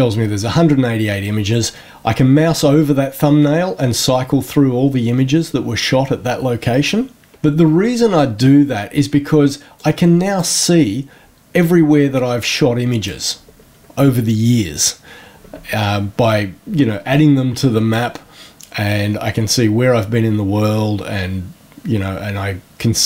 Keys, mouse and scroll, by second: 2.7-3.9 scroll down 1, 4.0-5.0 scroll down 1, 5.2-6.7 scroll down 2, 6.9-7.3 scroll down 1, 8.0-8.8 scroll down 4, 9.7-10.5 drag, 12.3-13.2 drag, 15.3 scroll down 1, 17.3-18.1 drag, 21.2 scroll up 1, 21.3 scroll down 1, 22.0-22.5 scroll up 2.